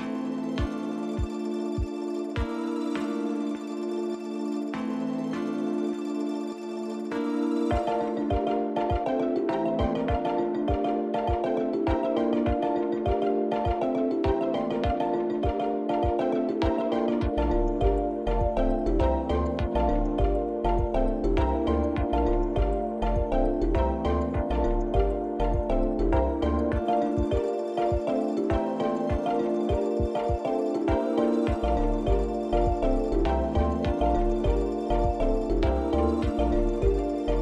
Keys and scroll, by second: 1.1 2, 1.3 Return, 4.7 3, 5.1 Return, 6.1 n, 8.2 alt+r, 10.1 8, 10.5 Return, 18.7 ctrl+alt+0, 29.9 i.